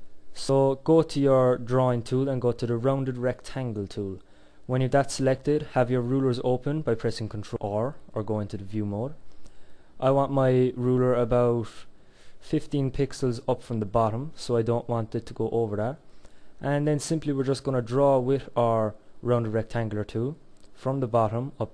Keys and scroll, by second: 7.2 ctrl+r.